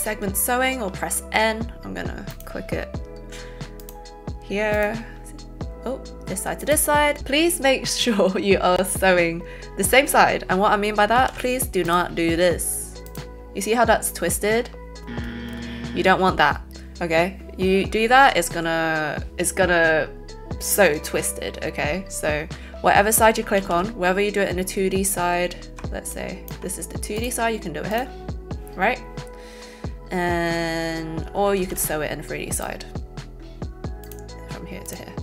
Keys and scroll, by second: 11.2 ctrl+z, 23.5 ctrl+z, 31.5 ctrl+z.